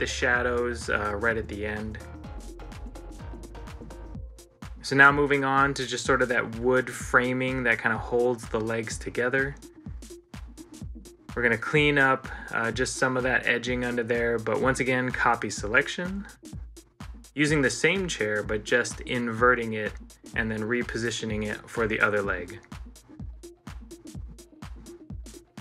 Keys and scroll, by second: 6.3 ctrl+z, 8.2 ctrl+z, 16.3 ctrl+l, 17.3 ctrl+c, 17.8 ctrl+l, 18.2 ctrl+l.